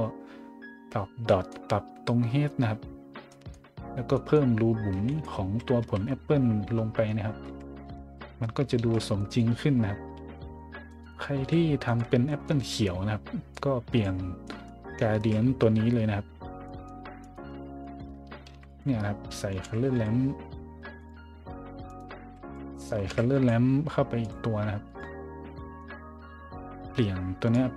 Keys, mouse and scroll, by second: 1.2 middle drag, 1.7 scroll up 1, 2.9 scroll down 1, 3.3 scroll up 1, 3.8-4.3 scroll up 2, 5.1 right click, 5.5 scroll up 1, 5.8 z, 7.1 scroll up 1, 7.4 z, 8.0 shift+z, 8.8 shift+z, 9.1 middle drag, 9.8 middle click, 10.1 a, 10.3 middle drag, 11.0 right click, 11.3 a, 11.8 right click, 12.2 middle drag, 12.5 a, 13.5 click, 14.2-14.7 scroll down 2, 15.1 shift+a, 16.3 scroll down 5, 16.6 scroll up 1, 17.2 right click, 17.5-20.4 typing, 17.8-18.2 scroll up 2, 18.7 click, 21.0 click, 21.9 right click, 22.2-23.8 typing, 22.4 click, 24.2 click, 24.8 click, 25.2 scroll down 1, 25.3-26.1 scroll up 2, 27.5 click.